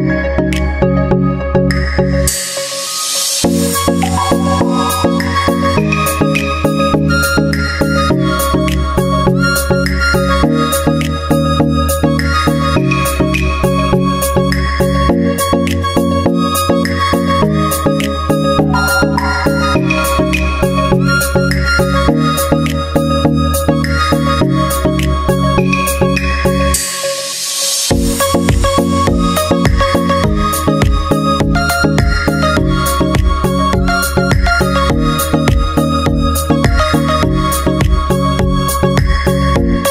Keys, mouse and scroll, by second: 0.0-1.0 drag, 1.0 middle click, 1.6-2.7 drag, 2.9 click, 3.7 middle click, 3.9-5.4 drag, 5.9-8.5 drag, 9.5-11.3 drag, 12.8-13.8 drag, 13.9-15.8 drag, 17.7-18.7 drag, 22.3-23.3 drag, 24.3-27.0 drag, 28.7 space, 29.0-32.3 drag, 32.4-34.0 drag, 34.1 click, 34.7 middle click, 35.4-38.1 drag, 35.9 space, 38.1 middle click, 38.7-39.8 drag.